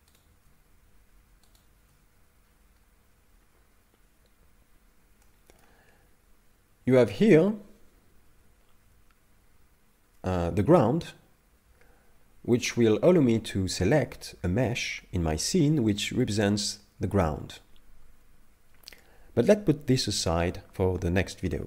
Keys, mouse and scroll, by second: 0.2 shift+right click, 1.6 shift+right click, 2.4-4.6 scroll down 7, 5.2 middle click.